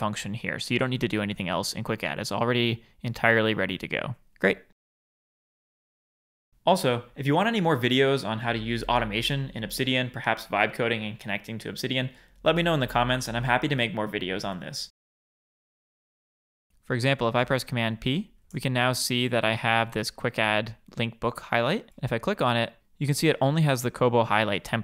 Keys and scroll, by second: 17.5 super+p.